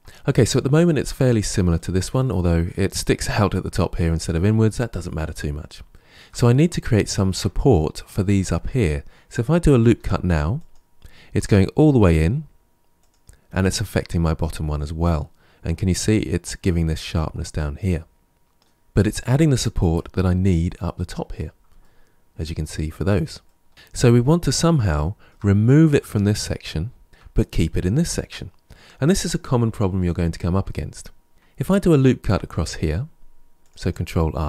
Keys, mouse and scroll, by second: 6.4-6.9 scroll up 1, 6.9-9.7 shift+middle drag, 9.7 ctrl+r, 13.4 Tab, 13.8-16.8 middle drag, 20.8-21.7 scroll down 1, 21.7-23.7 shift+middle drag, 23.7-24.9 scroll up 2, 24.9-28.5 shift+middle drag, 32.2 ctrl+r.